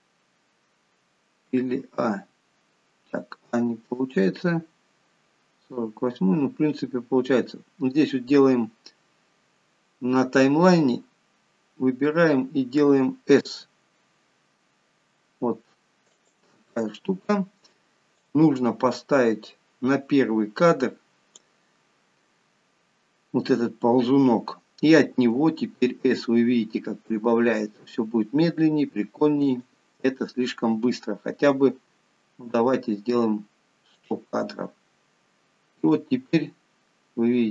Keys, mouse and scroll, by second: 1.9 a, 4.9-6.2 scroll up 6, 6.2-6.9 scroll down 2, 11.4-12.0 scroll up 1, 14.0 s, 18.6 click, 25.5 s, 32.3 s, 36.2 click.